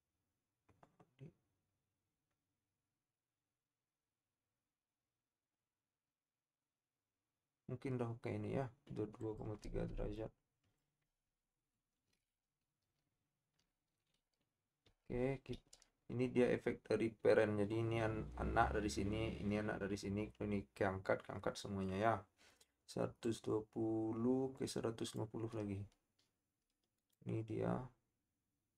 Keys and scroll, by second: 15.1 typing.